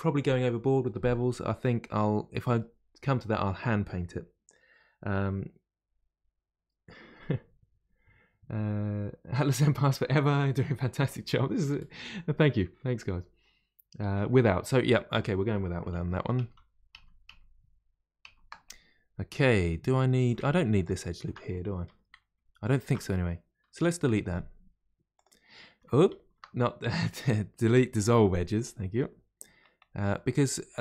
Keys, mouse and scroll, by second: 15.9 ctrl+z, 16.4 ctrl+z, 18.6-20.8 middle drag, 20.8 alt+click, 21.8 2, 22.6 alt+click, 23.7 Delete, 25.6 middle click, 26.1 ctrl+z, 27.6 Delete, 28.9 middle click, 29.8-30.1 scroll down 1, 30.1-30.8 middle drag.